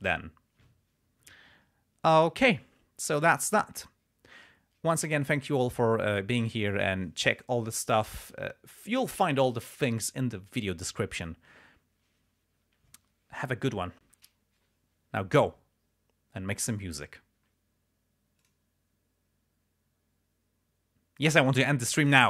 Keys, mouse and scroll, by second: 18.7 click.